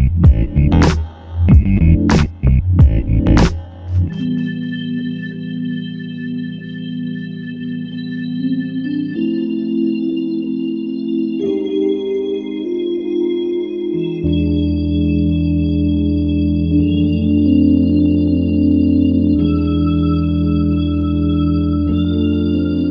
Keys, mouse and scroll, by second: 0.3 double click, 1.6 double click, 1.8 alt+click, 4.3 double click, 9.8 alt+click, 12.2 alt+click, 15.9 alt+click, 18.8 alt+click, 20.1 alt+click.